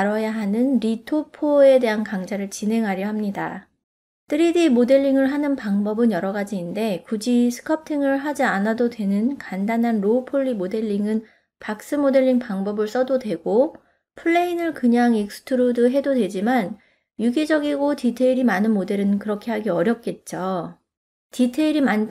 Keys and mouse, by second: 0.6 click, 0.8 middle click, 1.8 Tab, 2.0 click, 2.1 e, 2.6 ctrl+middle click, 3.0 click, 3.4 click, 3.6 middle click, 4.0 middle click, 4.6 ctrl+r, 5.0 middle click, 6.1 click, 6.3 g, 7.2 middle click, 7.7 ctrl+right click, 7.9 ctrl+right click, 8.1 ctrl+right click, 8.3 ctrl+right click, 8.6 ctrl+right click, 8.8 ctrl+right click, 9.0 middle click, 9.8 right click, 10.9 f, 11.5 click, 11.7 click, 11.9 click, 12.2 click, 12.4 middle click, 13.1 shift+middle click, 13.2 ctrl+click, 13.3 middle click, 13.7-14.2 d, 13.9 click, 14.7 middle click, 15.6 click, 16.0 f, 16.2 click, 16.4 f, 17.1 click, 17.5 KP_0, 17.8 ctrl+middle click, 18.0 click, 18.3 click, 18.9 click, 19.2 middle click, 19.4 shift+middle click, 19.7 middle click, 19.9 f, 20.5 click, 20.9 f, 21.1 middle click, 21.4 click, 21.9 f.